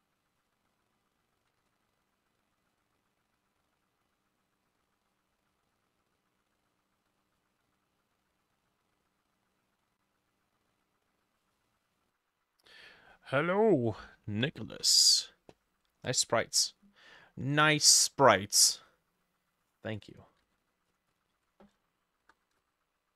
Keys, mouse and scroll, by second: 1.7 ctrl+click, 2.6 double click, 2.7 double click, 3.1 double click, 3.5 double click, 3.9 double click, 4.2 double click, 5.2 double click, 5.6 double click, 6.2 double click, 7.2 double click, 8.3 double click, 8.7 double click, 9.1 double click, 9.4 double click, 11.9 double click, 20.2-23.1 ctrl+drag, 20.3 ctrl+middle click, 21.2 ctrl+middle click, 21.4 ctrl+v, 22.3 BackSpace, 22.4 4, 22.6 Return.